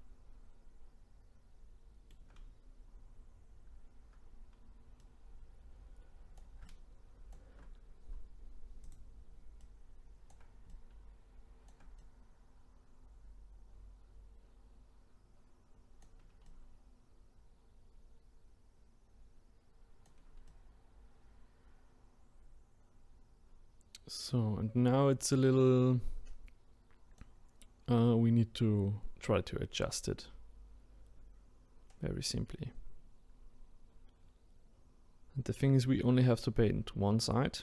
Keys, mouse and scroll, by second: 3.2-4.4 scroll up 2, 5.0-8.8 right drag, 8.8 click, 9.6-19.6 right drag, 20.5-37.6 right drag.